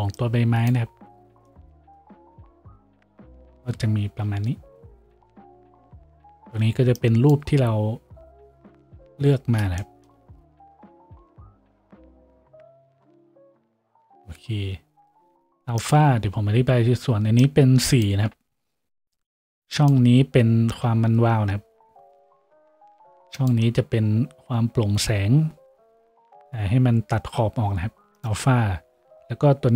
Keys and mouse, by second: 3.2 a, 20.8-29.7 middle drag.